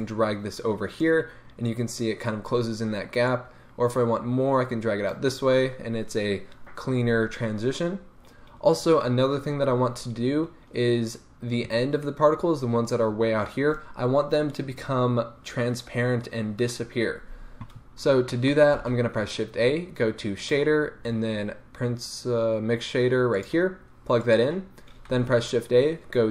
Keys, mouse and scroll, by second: 7.9-9.5 scroll down 4, 8.2-24.4 middle drag, 9.5-10.8 scroll down 1, 18.7 shift+a, 24.4 click, 25.1 shift+a.